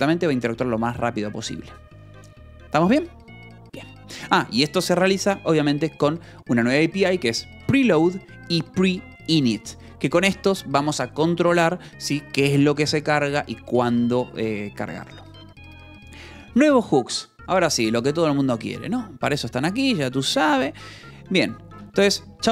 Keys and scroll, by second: 1.8 j, 3.9-5.9 typing, 7.5 Escape, 8.2 l, 9.8 v, 10.5 e, 10.8 Escape, 15.2 j, 15.8 k, 16.8 shift+v, 19.6 Escape, 19.9 h, 20.5 j, 21.2 k, 22.1 shift+v.